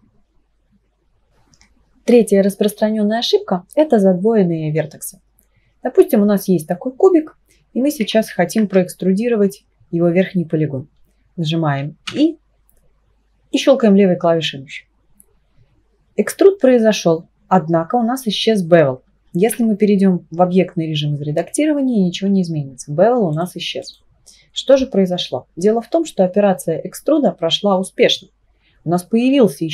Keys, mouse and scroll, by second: 8.2 ctrl+z, 12.1 e, 13.5-15.1 right drag, 19.5 Tab, 23.3 click, 23.8 click, 27.6 Tab.